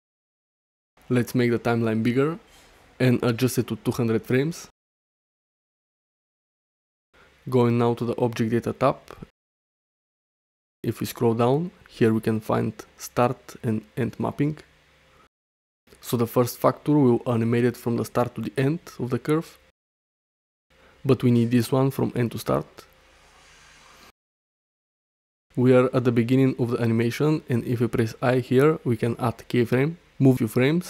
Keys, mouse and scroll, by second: 0.0 shift+middle drag, 2.5-3.3 drag, 4.1-6.0 drag, 5.8 0, 9.0 click, 9.5 middle click, 10.3 shift+middle click, 17.1-18.1 scroll up 1, 17.9 middle click, 18.7 shift+middle click, 19.8-21.1 drag, 21.5-23.6 drag, 25.3 middle click, 25.8 shift+middle click, 28.4 i, 29.5-30.8 drag.